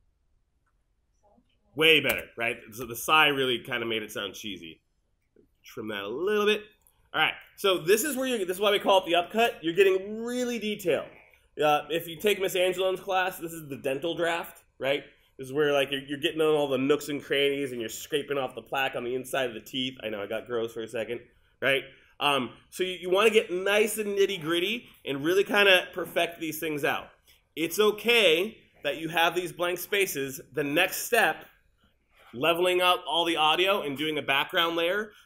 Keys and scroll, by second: 2.2 space.